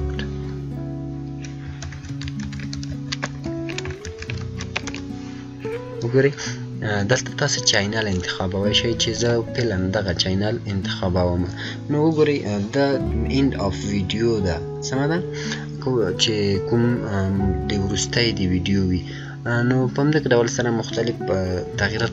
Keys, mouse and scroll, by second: 0.0-0.2 typing, 1.8 ctrl+a, 2.1-5.3 typing, 8.8-9.6 typing, 9.1 click, 21.3 click, 21.4 scroll down 1.